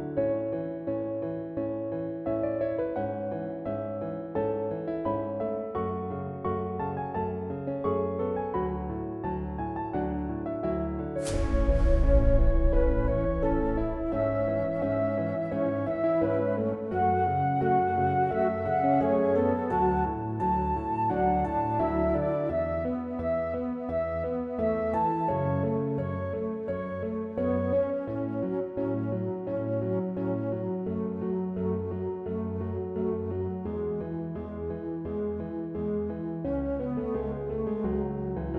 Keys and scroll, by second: 2.6-3.9 typing.